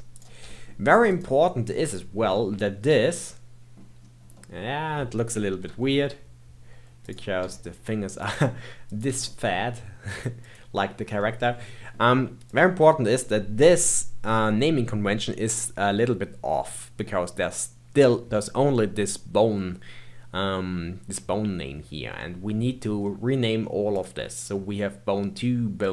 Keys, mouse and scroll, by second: 0.1 click, 0.4 g, 2.0 scroll down 2, 2.3-4.0 middle drag, 4.0-4.3 scroll up 2, 4.3-5.6 middle drag, 5.6 KP_3, 7.0 click, 7.4 g, 8.8 click, 9.0 g, 10.7-11.2 scroll down 1, 11.2-12.4 middle drag, 12.4 click, 22.1-23.9 middle drag, 23.9 click, 25.8 click.